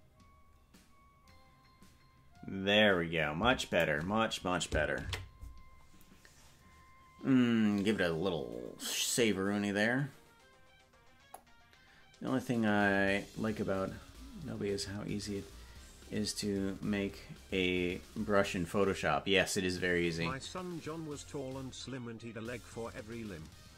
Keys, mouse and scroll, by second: 8.5 ctrl+s.